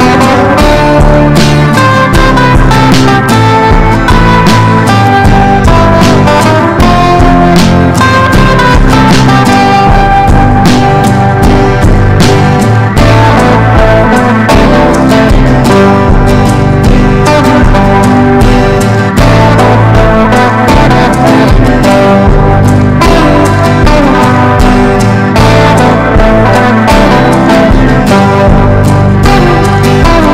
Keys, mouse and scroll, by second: 0.2 click, 0.8 ctrl+shift+g, 1.4 click, 1.8 ctrl+shift+g, 2.3 click, 2.8 ctrl+shift+g, 3.5 click, 4.0 ctrl+shift+g, 4.6 click, 5.0 ctrl+shift+g, 6.0 click, 9.4 F4, 10.0 click, 10.2 F4, 10.7 click, 13.2 F4, 13.5 click, 13.6 F4, 13.9 click, 16.5 F4, 17.3 click, 17.6 F4, 18.3 click, 20.3 F4, 20.7 click, 20.8 F4, 21.2 click, 23.1 F4, 23.3 click, 23.5 F4, 24.2 click, 25.7 ctrl+g, 26.4 click, 27.4 ctrl+v, 28.3-30.3 drag.